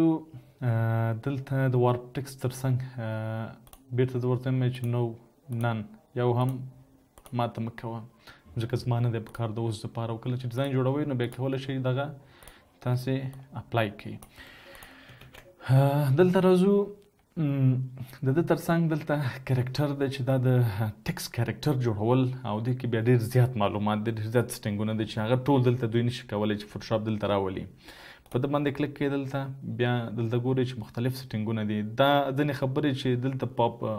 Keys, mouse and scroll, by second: 15.6 typing.